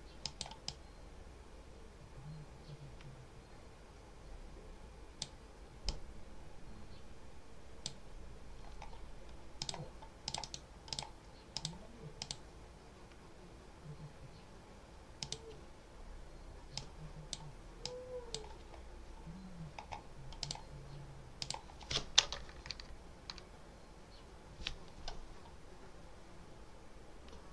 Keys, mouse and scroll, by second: 0.1 click, 3.6 click, 5.8-7.9 drag, 9.5 click, 10.2 click, 10.8 click, 11.4 click, 12.1 click, 15.1 click, 16.6-17.4 drag, 17.7 click, 19.8 scroll up 1, 20.3 click, 21.3 click, 22.6 Down.